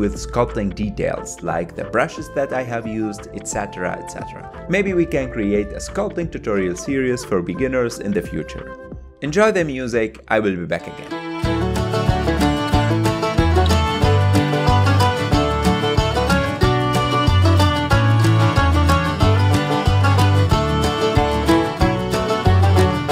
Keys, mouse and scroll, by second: 0.1 f, 0.2 click, 0.5 middle click, 0.6 shift+click, 0.9 middle click, 1.0 shift+click, 1.1 middle click, 1.3 shift+click, 1.4 shift+middle click, 1.5 shift+click, 2.0 click, 2.1 ctrl+z, 2.1 ctrl+click, 2.9 middle click, 3.0 ctrl+click, 3.6 middle click, 3.8 ctrl+click, 4.4 middle click, 4.5 shift+click, 4.9 ctrl+shift+click, 5.3 click, 5.6 middle click, 5.8 click, 6.0 middle click, 6.1 click, 6.3 middle click, 6.4 shift+click, 6.5 ctrl+middle click, 6.6 shift+click, 6.7 middle click, 6.8 f, 7.0 click, 7.1 ctrl+middle click, 7.2 click, 7.3 middle click, 7.4 click, 7.5 middle click, 7.6 click, 7.8 middle click, 7.9 click, 8.0 middle click, 8.2 click, 8.3 ctrl+middle click, 8.8 shift+click, 9.0 middle click, 9.9 click, 10.2 f, 10.4 click, 10.6 middle click, 10.7 click, 11.0 f, 11.1 ctrl+click, 11.3 ctrl+middle click, 11.4 click, 12.2 ctrl+shift+middle click, 12.8 f, 12.9 shift+click, 13.0 shift+middle click, 13.4 f, 13.7 middle click, 13.8 shift+click, 14.5 middle click, 14.6 shift+click, 14.7 middle click, 14.9 g, 15.0 click, 15.1 ctrl+z, 17.9 f, 18.0 click, 18.2 ctrl+z, 18.3 shift+middle click, 18.4 click, 18.8 ctrl+z, 19.0 click, 19.4 f, 19.5 click, 19.7 ctrl+middle click, 20.0 click, 20.2 ctrl+z, 20.3 KP_7, 20.5 ctrl+shift+middle click, 20.6 f, 20.8 click, 21.0 ctrl+middle click, 21.3 shift+click, 21.5 middle click, 21.6 shift+click, 21.7 ctrl+middle click, 22.0 KP_1, 22.7 ctrl+middle click.